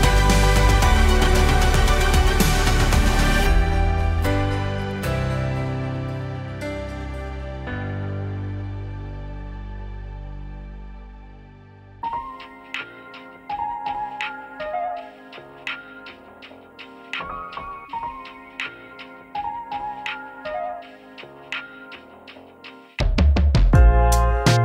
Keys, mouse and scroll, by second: 17.1-24.6 drag.